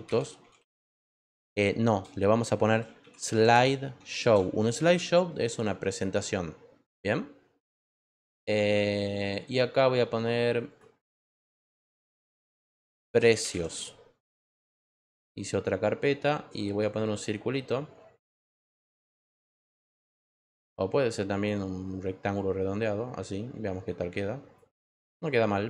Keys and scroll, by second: 0.0-1.1 typing, 2.4-5.4 typing, 12.3-13.9 typing.